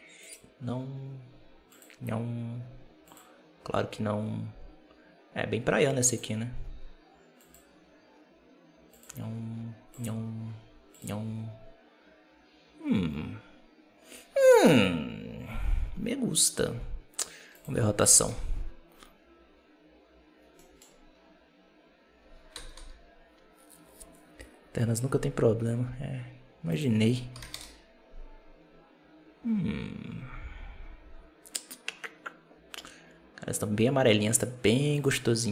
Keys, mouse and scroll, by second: 0.1 click, 17.4-20.5 drag, 20.5 middle click, 20.7-21.0 scroll down 3, 22.7 KP_0, 26.6-29.6 drag, 34.8-35.5 drag.